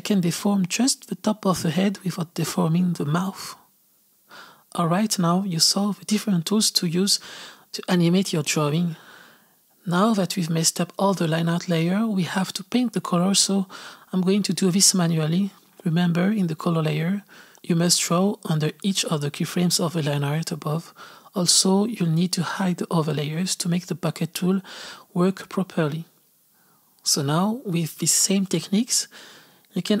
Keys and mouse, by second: 8.6-14.5 drag, 15.9 click, 17.6 click, 18.5-19.5 drag, 19.7 click, 19.9 click, 20.4 click, 21.2 click, 21.3 click, 21.7-23.2 drag, 23.8-25.3 drag, 29.6 click, 29.7-30.0 typing.